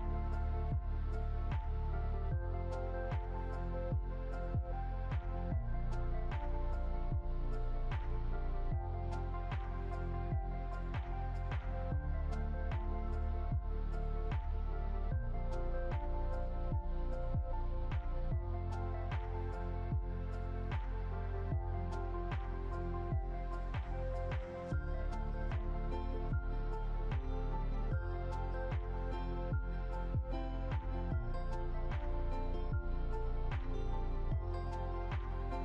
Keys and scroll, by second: 10.7 ctrl+0, 18.3 ctrl+z.